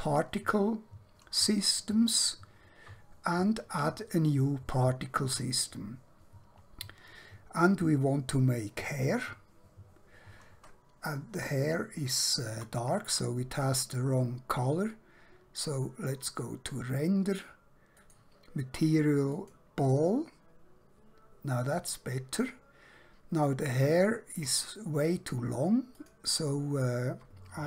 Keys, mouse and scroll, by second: 3.7 click, 8.9 click, 11.5 shift+middle click, 14.6-16.2 scroll down 1, 16.2 click, 26.0 click.